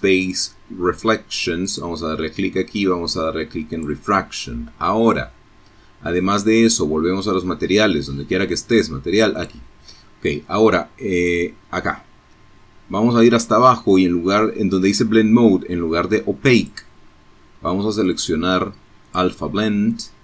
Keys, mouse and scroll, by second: 1.7 click, 7.3 click, 9.2 click, 10.6-11.3 scroll down 2, 16.0 click, 17.1 click, 17.9 click.